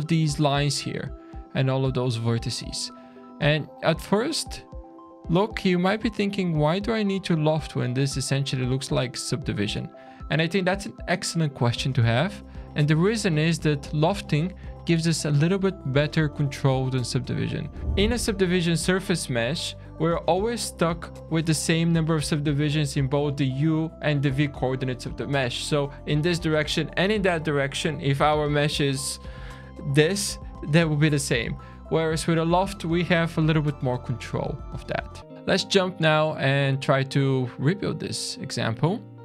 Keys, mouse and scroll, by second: 1.6 click, 2.5 click, 3.5 shift+middle click, 5.6 click, 6.1 shift+click, 7.0 click, 7.7 click, 8.6 click, 9.7-11.0 scroll down 3, 11.9 middle click, 12.6-12.9 scroll down 2, 13.1 shift+middle click, 14.2 scroll up 3, 14.5 Tab, 35.3 scroll down 3, 35.6 `, 36.8-37.3 scroll down 1, 37.3 middle click, 37.8 click, 38.6 middle click.